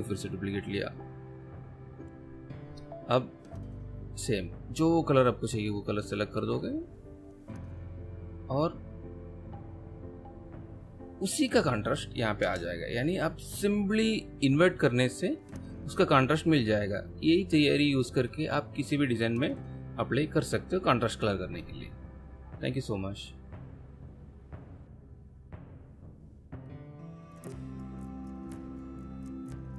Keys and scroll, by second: 12.4 space.